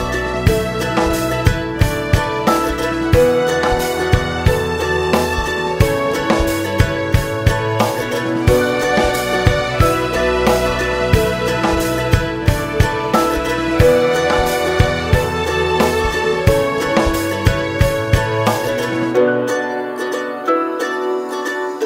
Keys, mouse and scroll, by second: 0.2 click, 0.7 click, 5.4-6.0 scroll up 2, 6.0 `, 6.9-17.5 drag, 17.5 scroll down 2, 17.6 alt+a, 17.7 `, 18.3 KP_Divide, 18.9 scroll up 1, 19.1 alt+a, 20.0 scroll up 1, 20.3 scroll down 1, 20.6 scroll up 1, 21.0 KP_0, 21.3-21.8 scroll up 1.